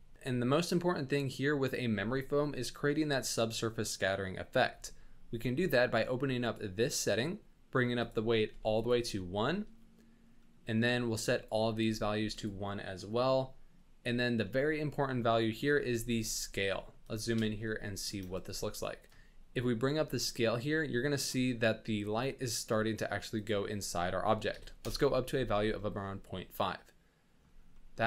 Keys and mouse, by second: 1.7 middle click, 6.4 click, 7.9 click, 10.5 middle click, 11.2-12.4 drag, 15.3 shift+middle drag, 16.8 middle click, 17.2 shift+middle click, 17.6-18.0 ctrl+middle drag, 18.3 shift+middle click, 19.1 shift+click, 19.9-21.3 shift+drag, 23.3-24.8 drag, 26.0-27.4 middle drag, 27.7-28.0 middle drag.